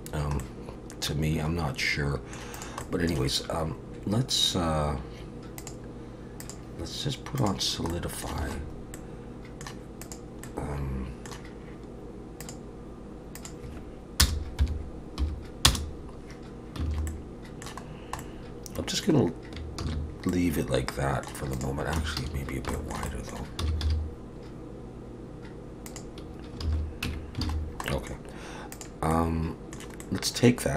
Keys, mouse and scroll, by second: 0.4 middle click, 2.5 click, 2.8 middle click, 5.6 click, 6.4 click, 7.9 middle click, 8.4 alt+a, 8.6-9.3 scroll up 3, 8.9 middle click, 10.0 click, 10.4 middle click, 12.4 click, 16.9 alt+a, 17.1 middle click, 17.9-18.2 scroll down 2, 18.2 middle click, 19.9 ctrl+s, 20.3 middle click, 21.5 click, 22.0 Tab, 22.2 a, 22.7 shift+middle click, 23.1 middle click, 23.6 s, 26.6 alt+a, 27.0 Tab, 27.5 alt+a, 27.6-28.1 scroll down 2, 27.8 middle click, 28.7 click, 29.1 middle click, 30.0 middle click.